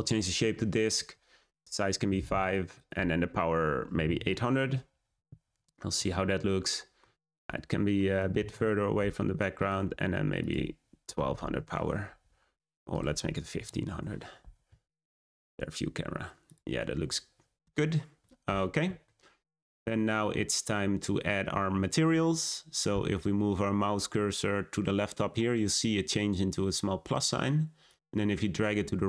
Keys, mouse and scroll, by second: 2.7-4.1 drag, 4.1 0, 6.6 scroll down 2, 6.9-7.6 middle drag, 7.6 scroll down 1, 7.9 middle click, 8.3 g, 10.4 click, 11.3 0, 12.9 click, 13.7 0, 14.6 `, 16.4 click, 16.8-17.4 scroll up 1, 19.0-19.9 shift+middle drag, 19.9-20.4 scroll up 1, 27.8-29.0 drag.